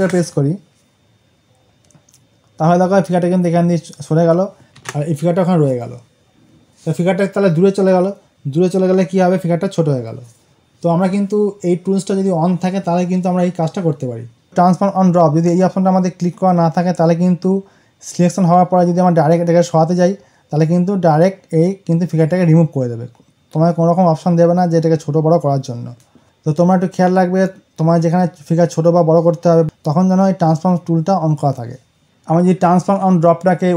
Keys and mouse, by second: 4.6 click, 4.9 ctrl+d, 33.7 click.